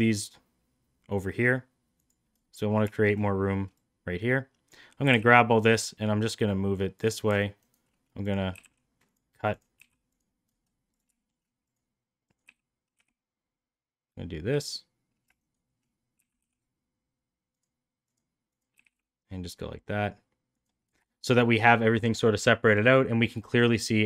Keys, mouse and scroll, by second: 3.0 shift+middle click, 3.8-4.8 drag, 5.1 g, 8.2 click, 8.5 g, 9.1 click, 9.8 g, 11.3 shift+middle drag, 15.4 shift+right click, 16.2 g, 18.1 click, 18.5 click, 18.8 g, 21.2 shift+middle click, 23.4 middle click.